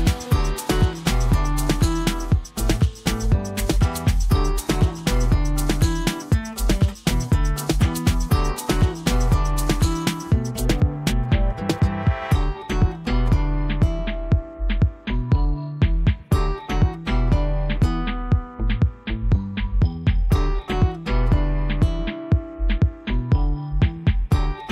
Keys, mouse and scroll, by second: 10.8 ctrl+Num_Lock, 10.8 ctrl+click, 11.1-11.4 ctrl+space, 12.3 b, 13.1 alt+click, 14.8 click, 19.5-20.2 typing, 21.3 alt+click.